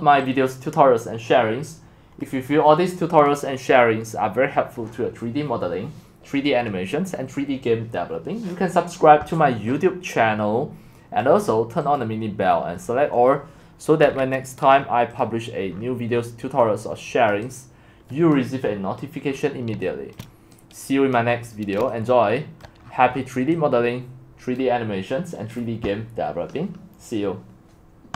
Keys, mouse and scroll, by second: 2.2-9.2 drag, 11.2-12.8 drag, 12.8-15.2 scroll down 6, 15.2 scroll down 1, 15.2 click, 15.7-17.2 scroll down 12, 17.2 scroll up 10, 17.3-18.3 middle drag, 18.3 click, 18.7 middle click, 18.8-20.1 scroll up 14, 20.1 shift+middle click, 21.1 click, 21.3 middle click, 21.4-22.6 scroll up 5, 22.6 middle click, 22.8-24.5 scroll down 14, 24.5 click.